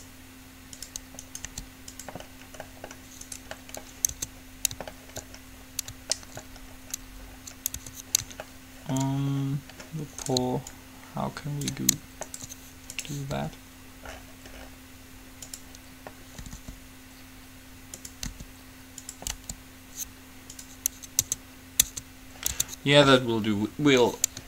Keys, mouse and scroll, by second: 1.6 g, 4.3 Tab, 7.9 Tab, 10.4-11.8 drag, 11.9 click, 11.9-13.1 right drag, 13.5-14.9 drag, 13.5 right click, 13.5 r, 16.6 r, 18.4 r, 19.5 g, 21.4 Tab, 22.1 Tab, 22.9 Tab.